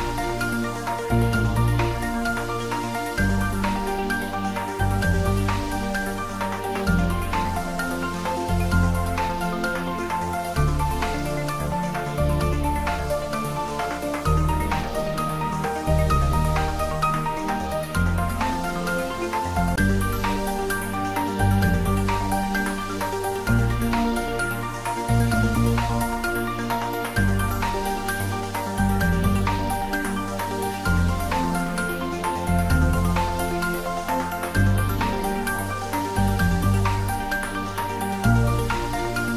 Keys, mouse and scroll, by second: 2.5-5.9 middle drag, 5.9-10.0 drag, 15.8 click, 22.0 g, 24.7 y, 34.1 Left, 38.7 Left.